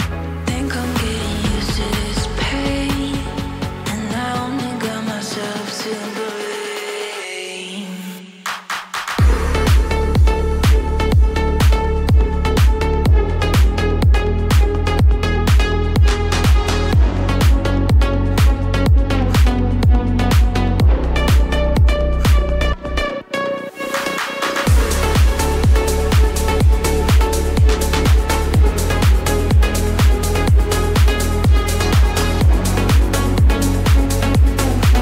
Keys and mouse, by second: 3.7-6.2 drag, 7.0-9.1 middle drag, 10.3-12.6 middle drag, 15.7 a, 17.0 ctrl+a, 19.8 ctrl+s, 21.4-22.0 drag, 22.5 shift+middle drag, 25.0-25.5 shift+middle drag, 25.9 a, 28.4 ctrl+j, 30.8 click, 32.1 click, 34.5-35.0 middle drag.